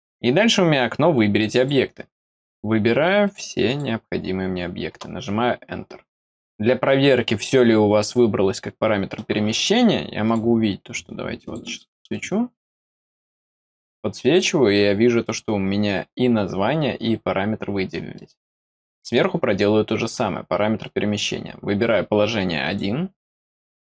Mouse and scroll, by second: 1.5 click, 2.3 click, 3.1 click, 3.6 click, 10.2 click, 11.3 click, 12.0 click, 18.1 middle click, 18.8 middle click, 19.9 click, 22.5 click.